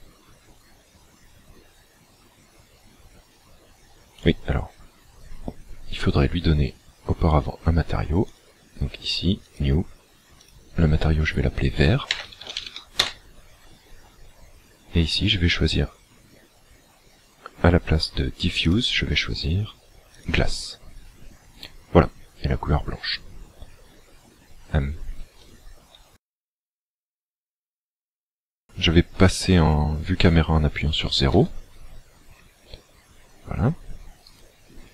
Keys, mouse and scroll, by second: 8.2 click, 9.4 click, 10.4 click, 18.6 click, 31.3 KP_0, 32.4-32.8 scroll down 3, 32.8 scroll up 1, 34.2 right click.